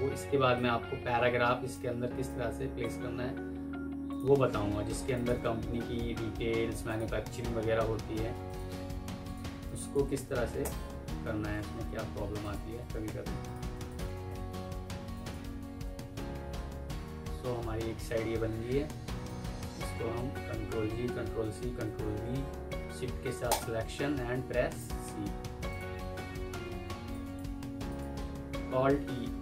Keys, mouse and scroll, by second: 5.0 shift+click, 5.6 typing, 6.5 Escape, 9.6 double click, 10.3-11.0 typing, 12.3 shift+click, 13.0 Escape, 13.0 t, 13.8 shift+click, 15.0 alt+click, 15.7 Right, 16.8 F3, 19.1 alt+click, 20.4 ctrl+g, 21.6 ctrl+v, 23.3 shift+click, 24.6 typing, 26.4 F2, 27.3 Escape, 28.8 alt+e, 29.2 m.